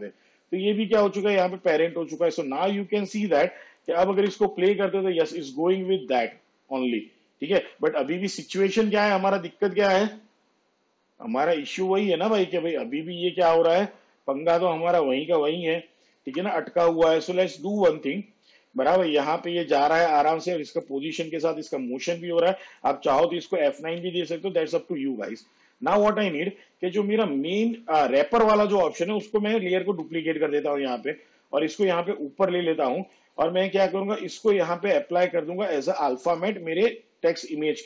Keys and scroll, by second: 4.3 space, 16.4 space, 24.1 F9, 30.0 ctrl+d.